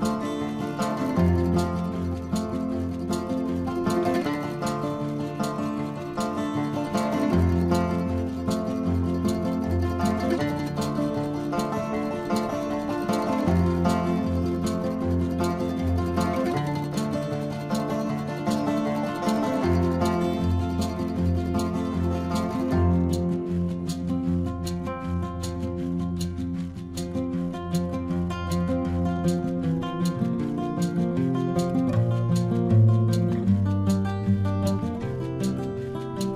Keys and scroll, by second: 0.4 ctrl+alt+z, 1.3 space, 2.4 ctrl+=, 2.6-5.4 typing, 2.8 ctrl+=, 4.1 ctrl+-, 4.7 ctrl+-, 5.0 ctrl+-, 6.7 space, 9.0 space, 9.3 ctrl+alt+z, 9.5 ctrl+alt+z, 10.9 space, 12.0 space, 14.2 ctrl+alt+z, 14.6 space, 15.4 space, 16.9 ctrl+alt+z, 17.2 ctrl+alt+z, 18.2 space, 18.3 ctrl+alt+z, 18.4 space, 19.0 space, 19.9 ctrl+=, 20.1-22.1 typing, 20.4 ctrl+=, 21.4 ctrl+=, 21.8 ctrl+-, 22.1 ctrl+-, 23.5 space, 24.0 ctrl+alt+z, 24.7 space, 26.6 ], 28.9 space, 29.0 ], 30.8 ctrl+alt+z, 32.4 ctrl+=, 32.9 ctrl+=, 33.2 ctrl+=, 33.3 space, 34.0 ctrl+=, 34.1 space.